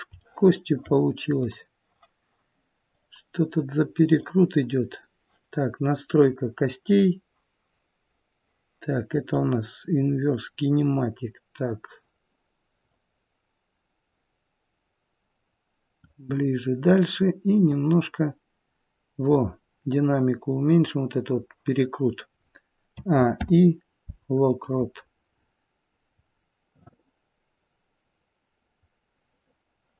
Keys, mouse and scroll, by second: 0.1 scroll up 2, 0.2 shift+middle click, 1.2 click, 2.9 click, 6.8 click, 9.9-11.6 scroll down 3, 10.4-11.6 scroll up 1, 11.6 scroll down 1, 11.7-12.9 scroll down 1, 12.9 click, 16.3-17.7 scroll down 2, 17.7 click, 17.7-18.1 scroll down 2, 22.9 a, 23.4 i, 25.3-25.7 scroll down 4, 26.3-29.0 scroll down 1.